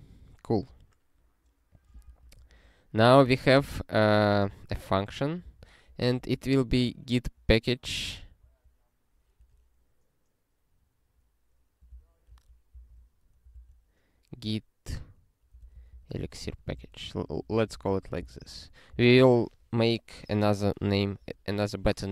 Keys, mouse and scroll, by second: 0.0 scroll up 1, 1.7 click, 2.4 ctrl+e, 4.5 click, 5.4 ctrl+b, 6.0 alt+f, 6.3 alt+f, 6.7 alt+b, 8.4 -, 9.0 BackSpace, 11.9 alt+b, 12.3 alt+f, 12.8 alt+d, 13.5 alt+b, 15.3-16.9 typing, 17.5 ctrl+a, 17.9 ctrl+alt+f, 18.3 ctrl+e, 18.9 Return, 21.2 Return.